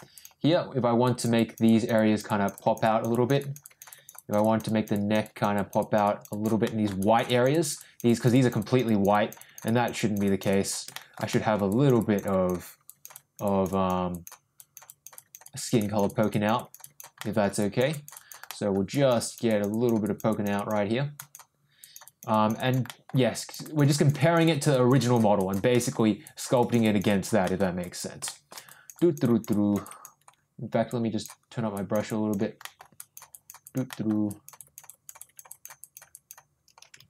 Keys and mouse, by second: 0.1 click, 1.0 click, 1.3 click, 1.6 click, 1.9 click, 2.2 click, 2.5 click, 2.8 click, 3.1 click, 3.4 click, 3.6 click, 3.9 click, 4.1 click, 4.4 click, 4.6 click, 4.9 click, 5.2 click, 5.5 click, 5.8 click, 6.0 click, 6.3 click, 6.6 middle click, 7.0 click, 7.2 click, 7.5 click, 7.8 click, 8.0 click, 8.3 click, 8.6 click, 8.8 click, 9.1 click, 9.3 click, 9.6 click, 9.9 click, 10.2 click, 10.5 click, 10.9 shift+middle click, 11.3 middle click, 11.7 click, 12.0 click, 12.2 click, 12.8 click, 13.1 click, 13.4 click, 13.7 click, 14.1 click, 14.5 click, 14.8 click, 15.1 click, 15.4 click, 15.8 click, 16.1 click, 16.3 click, 16.5 click, 16.8 click, 17.2 middle click, 17.6 click, 17.9 click, 18.1 click, 18.4 middle click, 18.9 click, 19.2 click, 19.4 click, 19.7 click, 20.0 click, 20.3 click, 20.5 click, 21.1 click, 21.8 click, 22.0 click, 22.3 click, 22.5 click, 22.8 middle click, 23.3 click, 23.6 click, 23.9 click, 24.2 click, 24.4 click, 24.7 click, 24.9 click, 25.4 click, 25.7 middle click, 26.2 click, 26.5 click, 26.8 click, 27.0 click, 27.4 middle click, 27.8 click, 28.2 shift+middle click, 28.7 click, 28.9 click, 29.2 click, 29.5 click, 29.8 click, 30.9 click, 31.7 click, 32.1 click, 32.6 middle click, 33.0 click, 33.3 click, 33.6 click, 33.9 middle click, 34.3 click, 34.5 click, 34.8 click, 35.2 click, 35.5 click, 35.8 click, 36.1 click.